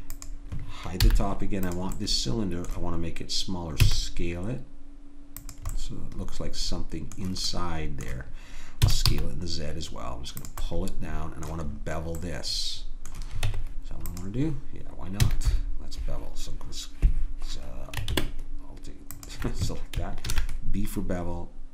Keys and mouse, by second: 0.1 right click, 1.0-2.6 drag, 1.0 h, 3.9 s, 5.8 middle click, 6.0 middle click, 8.9 s, 13.5 Tab, 15.2 a, 19.1-21.7 drag, 20.3 ctrl+b.